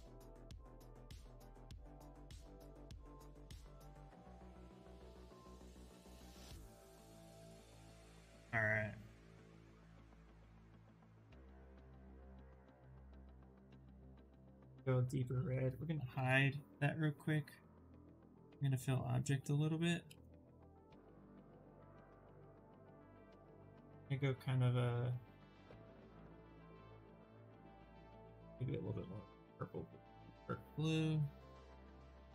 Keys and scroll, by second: 7.4 s, 9.8 shift+f, 10.2 shift+f, 13.0 c, 20.7 2, 21.6 space.